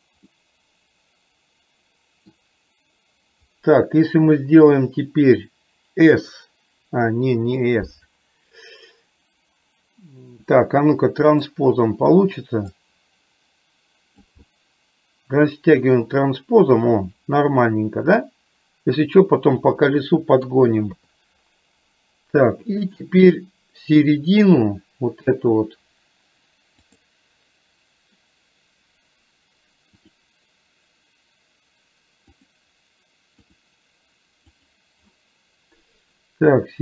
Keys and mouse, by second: 0.4-2.3 middle drag, 11.4 click, 12.9-14.3 drag, 14.7-20.5 middle drag, 21.0 KP_3, 24.4 click, 27.0 click, 30.0-32.4 drag, 33.5-35.3 drag.